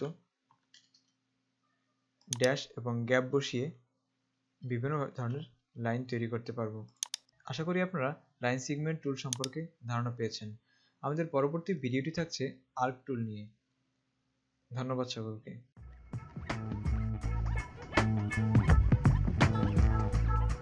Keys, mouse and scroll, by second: 0.2-0.7 typing, 2.6 click, 5.2 typing, 9.5 click, 12.1 right click.